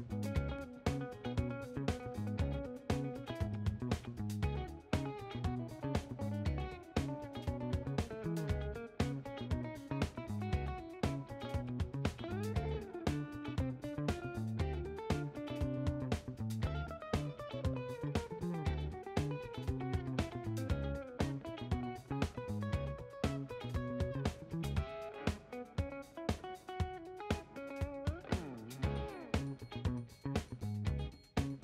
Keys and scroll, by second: 0.0-3.8 typing, 4.1 Left, 5.0 BackSpace, 5.0 6, 5.2 Return, 18.9 4, 19.9 Return, 23.4 1, 24.8 2, 25.4 Return, 28.3 shift+Right, 28.8 0, 28.9 Right, 29.5 1, 29.7 Return.